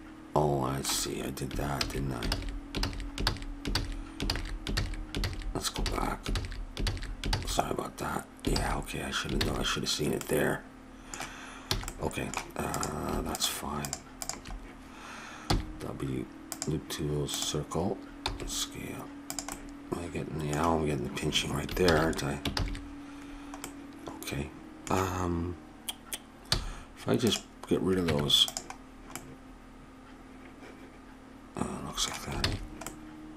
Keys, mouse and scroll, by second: 1.7 ctrl+z, 2.3 ctrl+z, 2.8 ctrl+z, 3.2 ctrl+z, 3.7 ctrl+z, 4.2 ctrl+z, 4.7 ctrl+z, 5.2 ctrl+z, 5.8 ctrl+z, 6.3 ctrl+z, 6.9 ctrl+z, 7.3 ctrl+z, 8.5 ctrl+z, 10.2 ctrl+z, 11.7 a, 12.7-14.9 drag, 15.5 w, 18.3 s, 19.5 click, 21.9 ctrl+z, 22.5 ctrl+z, 26.5 x, 28.1 Tab, 30.9-31.9 middle drag, 32.4 ctrl+z, 32.8 middle click.